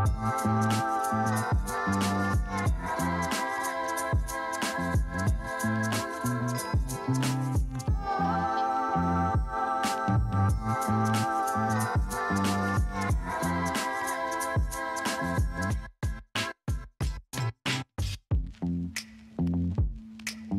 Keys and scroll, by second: 2.5 Escape, 4.4 ctrl+space, 4.6 ctrl+space, 6.0 ], 10.0 Escape, 16.2 space, 20.1 F9.